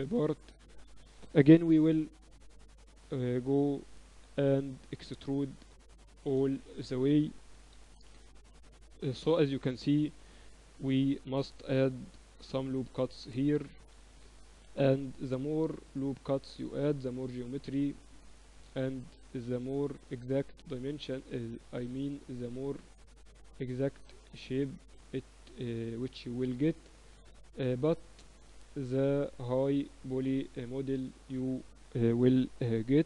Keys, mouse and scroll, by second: 0.6-1.8 right drag, 1.8-3.0 middle drag, 1.8 e, 6.0-8.0 middle drag, 9.6 middle click, 10.2-12.2 right drag, 11.4 ctrl+r, 14.8 a, 15.0-16.8 right drag, 15.4-17.0 drag, 17.2 click, 19.0 click, 19.8 right click, 21.0 click, 22.7 click, 23.5 middle click, 24.0-25.7 right drag, 24.5-26.5 drag, 26.5-28.4 right drag, 26.9-29.0 drag, 28.6-31.4 middle drag, 29.7-31.8 right drag, 30.2-32.1 drag, 32.6-33.0 drag.